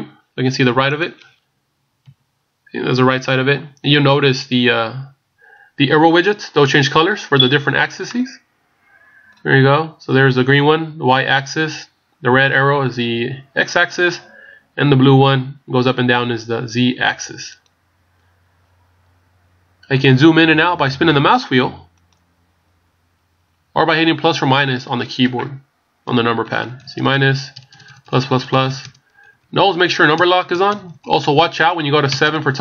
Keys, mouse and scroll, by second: 1.0 click, 2.0 KP_3, 8.1 middle click, 22.1 click, 22.4-23.1 scroll down 5, 22.9-23.4 scroll up 7, 23.4-24.2 scroll down 5, 24.0 scroll up 1, 24.5 scroll down 1, 26.1-27.2 KP_Subtract, 27.5-28.2 KP_Add, 29.2 KP_Subtract, 30.2 KP_Add, 30.6 KP_Add, 31.2 KP_Subtract, 32.1 KP_Add.